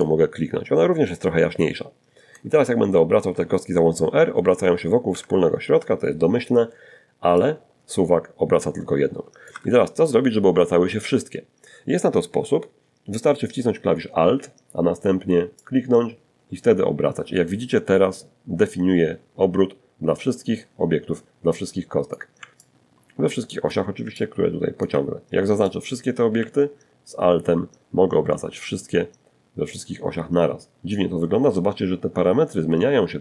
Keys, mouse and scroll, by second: 1.4 r, 3.3 Escape, 5.6-7.9 drag, 7.7 Escape, 13.8-20.4 alt+drag, 20.8-22.1 alt+drag, 22.4 alt+click, 23.9-33.2 alt+drag.